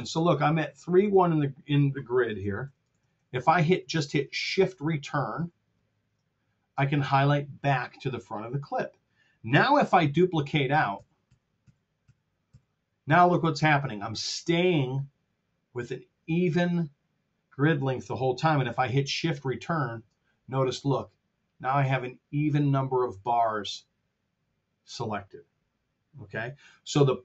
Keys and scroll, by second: 2.5 r, 5.8 shift+Return, 10.9 super+d, 19.5 shift+Return.